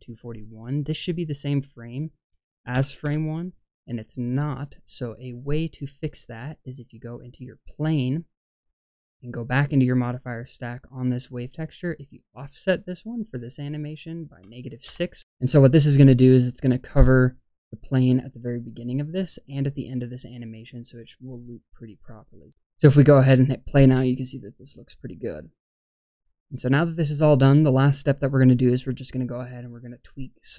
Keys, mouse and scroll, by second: 1.3-3.0 drag, 6.9 click, 7.9 click, 9.7 click, 12.0-15.2 drag, 18.6-22.5 drag.